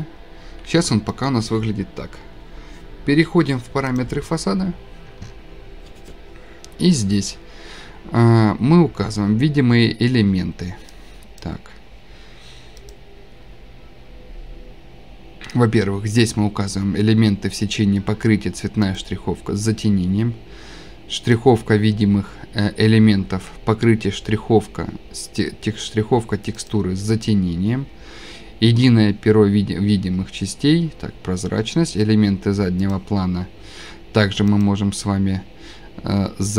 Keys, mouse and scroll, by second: 1.2 right click, 4.0 click, 11.4 click, 12.9 click, 19.0 click, 21.3 click, 26.7 click, 28.4 click, 32.9 scroll down 1, 33.4 click, 34.6 click.